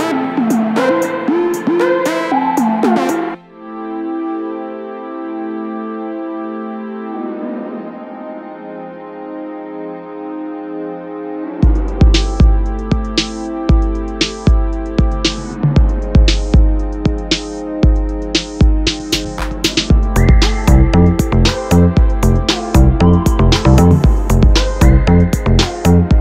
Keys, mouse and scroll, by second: 2.6 g, 7.3 click, 8.7-9.7 middle drag, 9.7 click, 10.2 shift+click, 10.9 KP_7, 12.2 g, 15.8 click, 16.1-17.1 middle drag, 17.1 z, 18.0 click, 18.3-20.7 middle drag, 20.7 drag, 21.7-23.4 drag, 23.4-23.9 middle drag, 23.9 s, 25.6 g.